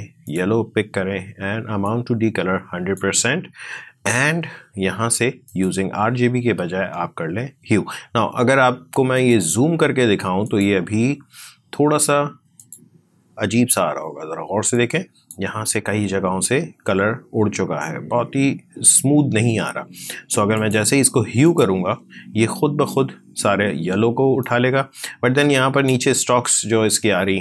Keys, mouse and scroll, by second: 9.0-17.6 drag, 20.4 click, 24.3-27.4 drag.